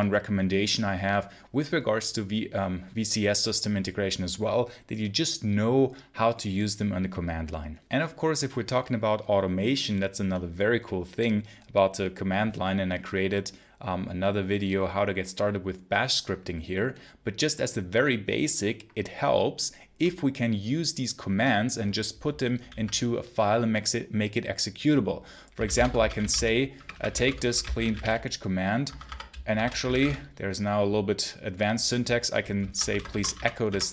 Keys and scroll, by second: 22.5 ctrl+l, 25.2-30.3 typing, 28.7 Escape, 32.3-33.9 typing.